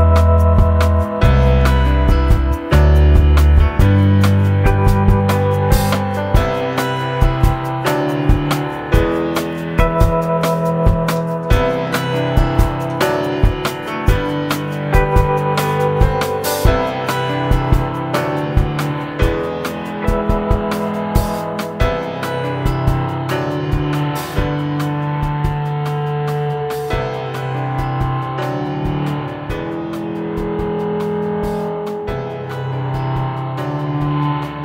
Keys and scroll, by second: 0.0-0.7 typing, 1.0 ctrl+a, 3.2 s, 3.8 i, 4.2 g, 4.7 p, 5.0 ctrl+a, 24.8 ctrl+c, 25.2 ctrl+z.